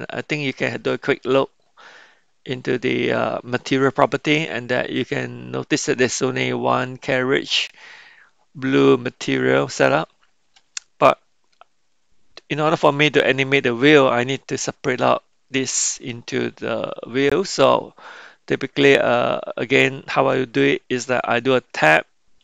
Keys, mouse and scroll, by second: 0.6 click, 11.1-12.3 middle drag, 12.6 middle click, 14.6-15.8 shift+middle drag, 16.1-17.2 middle drag.